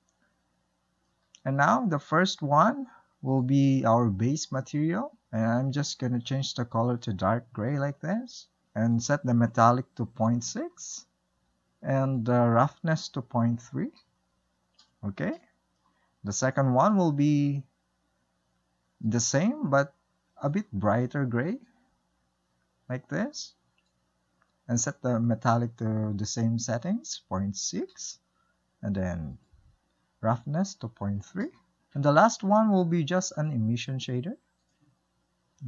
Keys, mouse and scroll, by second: 0.7-1.1 shift+middle drag, 1.1 click, 2.1-3.0 drag, 3.6 click, 9.4-15.3 drag, 15.3-17.3 shift+middle drag, 17.3-17.8 drag, 19.5 click, 20.9-21.4 drag, 24.6-28.2 drag, 29.7-32.8 drag, 33.3 click, 34.2 click, 34.8-35.6 drag.